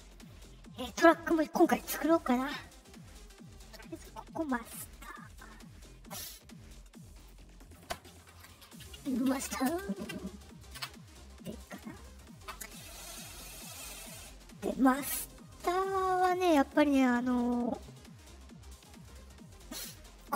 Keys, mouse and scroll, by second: 3.1 middle click, 3.9 click, 5.0-5.3 drag, 7.1 click, 9.6 space, 10.7 Return, 15.5 click, 16.6 click, 20.1 click.